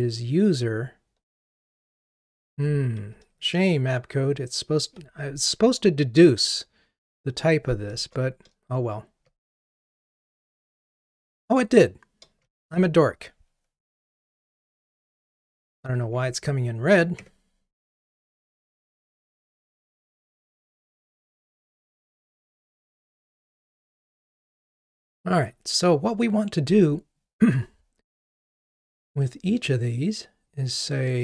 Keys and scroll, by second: 8.0 alt+Return, 14.8 Delete.